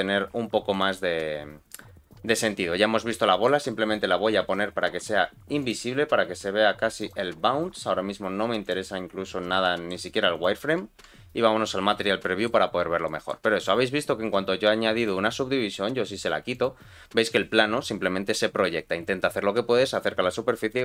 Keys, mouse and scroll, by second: 0.7 click, 2.3 click, 3.2 shift+middle click, 4.0-4.3 scroll down 2, 4.8-5.6 scroll down 1, 5.6 click, 5.8-6.2 scroll down 2, 6.8 scroll down 1, 6.9-8.8 drag, 9.1-9.5 scroll up 2, 9.6 shift+middle click, 10.3 click, 10.8 z, 11.4-11.8 scroll up 1, 11.8-12.2 scroll down 2, 12.2 middle click, 12.8 scroll up 2, 13.0 shift+middle click, 13.5 click, 13.8-14.9 scroll down 1, 14.9 click, 15.7-16.4 scroll down 1, 16.5 click.